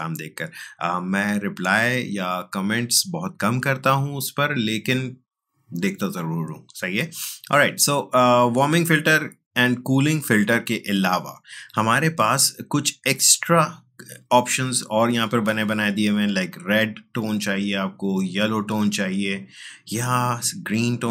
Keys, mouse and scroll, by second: 8.5-21.1 drag.